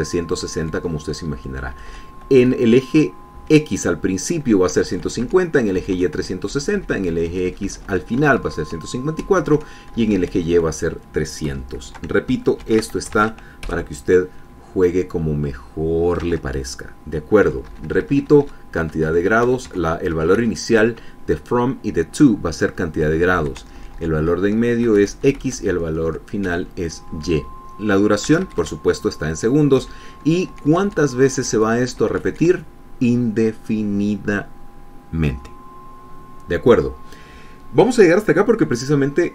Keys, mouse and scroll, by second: 0.2 Left, 1.1 Right, 2.1 Up, 2.4 Right, 3.1 Left, 5.4 Right, 7.2 Down, 7.4 Left, 8.9 Right, 10.1 Right, 10.6 Left, 12.1 Delete, 12.5 KP_0, 13.3 ctrl+s, 13.9 ctrl+alt+Tab, 14.3 alt+F5, 17.0 alt+Tab, 18.1 Up, 18.4 Left, 19.5 Down, 19.7 Up, 20.1 Down, 20.4 Up, 20.8 Down, 21.1 Up, 23.7 Down, 24.0 Up, 24.3 Right, 25.6 Left, 25.8 Down, 26.1 Up, 26.3 Right, 27.2 Down, 27.9 Down, 28.9 Left, 30.5 Down, 31.2 Right.